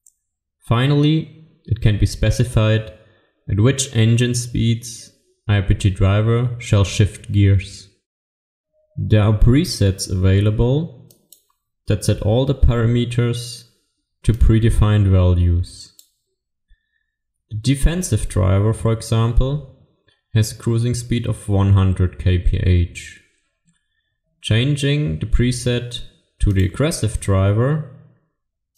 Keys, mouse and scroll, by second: 11.2 click.